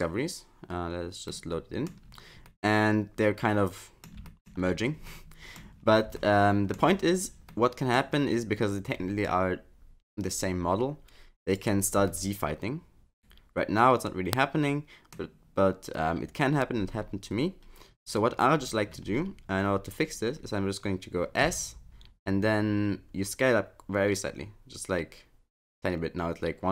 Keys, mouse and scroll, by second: 0.4 middle click, 1.3 middle click, 2.1-2.5 scroll down 3, 2.5 middle click, 4.3 shift+middle click, 4.6-5.1 scroll up 2, 5.1 middle click, 5.8-6.1 scroll up 2, 6.2 shift+middle click, 7.5 middle click, 11.5 click, 12.0 scroll up 1, 12.1 middle click, 16.8-17.3 scroll up 6, 17.9-18.8 scroll down 7, 21.4 s.